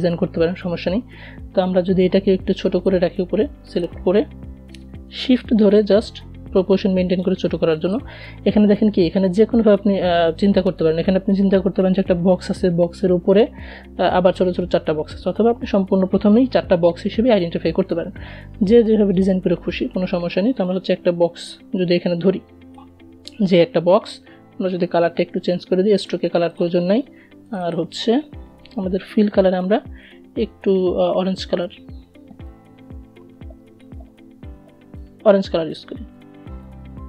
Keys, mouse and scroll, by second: 1.2-4.3 drag, 4.3-6.1 shift+drag, 17.5 click, 19.1-24.3 shift+drag, 28.4-35.9 drag.